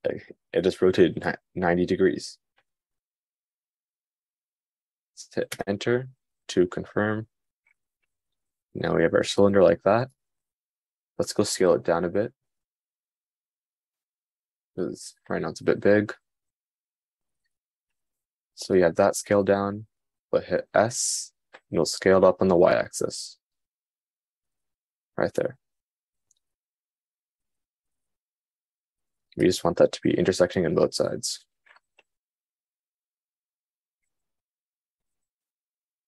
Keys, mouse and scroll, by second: 10.8-11.8 middle drag, 18.7-35.8 middle drag.